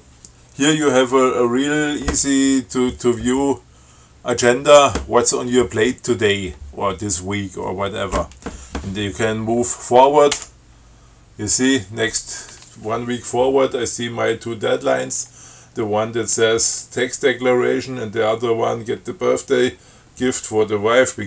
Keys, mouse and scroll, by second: 10.6 f.